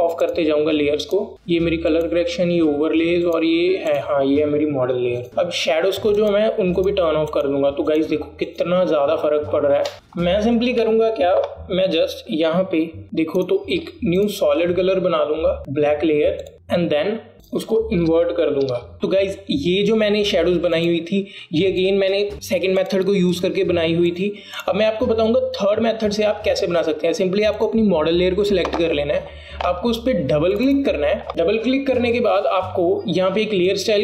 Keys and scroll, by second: 18.9 alt+BackSpace.